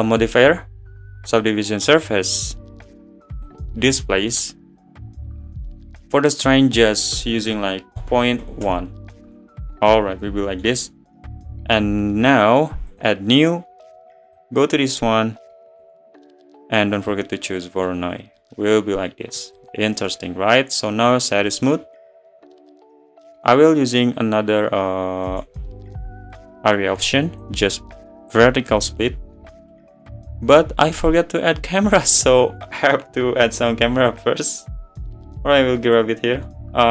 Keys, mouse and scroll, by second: 1.4 click, 3.5-8.7 drag, 8.7 BackSpace, 9.8-10.9 middle drag, 10.9 `, 13.1-17.6 drag, 17.6-18.0 middle drag, 18.0-18.4 scroll up 3, 18.4-19.7 middle drag, 19.7 click, 21.1-21.5 right drag, 21.5-21.8 middle drag, 21.8 scroll down 4, 22.2-27.4 middle drag, 27.4-30.1 right drag, 30.1 click, 30.3-31.1 middle drag, 31.1-33.8 scroll up 3, 32.3 middle click, 33.8 click, 35.3-36.5 drag, 36.5-36.9 middle drag.